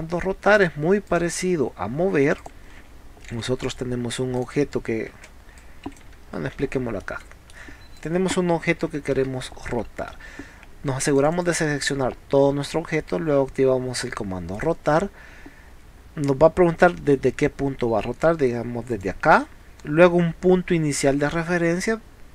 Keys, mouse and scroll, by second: 0.6 click, 1.1 click, 2.4 click, 3.4 p, 3.7 click, 4.4 click, 5.2 space, 5.3 scroll down 1, 5.6 click, 6.6 scroll up 1, 7.1 middle click, 8.0 click, 9.5 middle click, 9.8 scroll up 2, 10.6 scroll up 2, 11.1 click, 11.5 click, 14.6 click, 19.0 click.